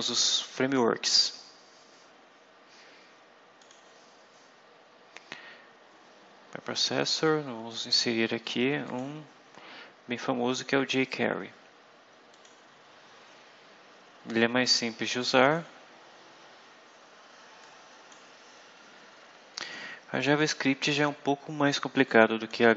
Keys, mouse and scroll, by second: 3.5 click, 7.5-7.8 scroll down 2, 8.0 scroll down 2, 8.7 click, 12.2 click, 15.3 click, 17.5 click, 20.7-22.6 drag.